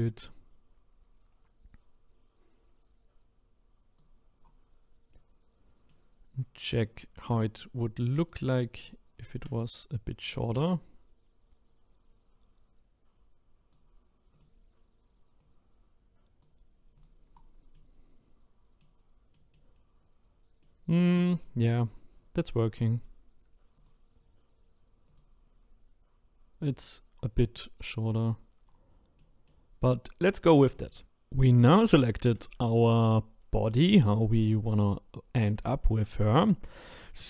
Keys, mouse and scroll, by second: 4.4-4.9 scroll down 7, 4.9 scroll up 1, 5.1-6.8 middle drag, 6.8 click, 7.2-8.2 scroll up 6, 8.2 click, 9.1 shift+click, 9.9 click, 14.3 click, 15.4 click, 17.0 click, 17.3-17.7 scroll down 3, 17.7-19.7 middle drag, 19.7-20.5 scroll up 4, 20.6-21.7 middle drag, 21.7-22.3 scroll down 1, 22.3-23.7 middle drag, 23.7 click, 25.1 click, 25.9-26.9 scroll up 2, 26.9-28.6 scroll down 1, 28.6-29.2 scroll down 2, 29.2 middle click, 29.8-30.7 scroll up 1, 30.7 shift+middle click, 34.8-35.6 scroll up 3, 35.6-37.2 shift+middle drag.